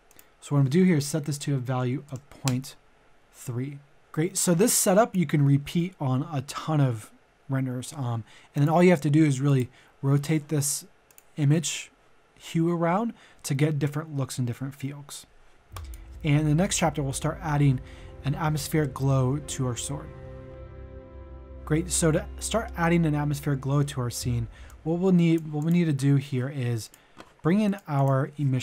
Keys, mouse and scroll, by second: 1.7 KP_Decimal, 2.1 KP_3, 4.0 middle click, 4.4 click, 21.9 click, 23.6 middle click, 24.6 click.